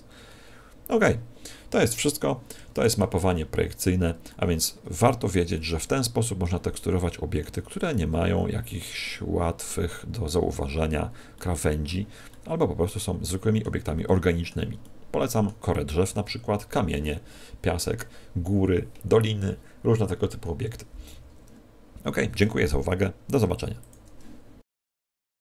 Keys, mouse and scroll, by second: 2.5 Escape, 3.3 scroll down 3, 4.2 scroll down 1, 4.2 middle click, 5.6 middle click, 7.8 middle click, 11.3 middle click, 12.3 middle click, 14.0 middle click, 14.8 shift+middle click.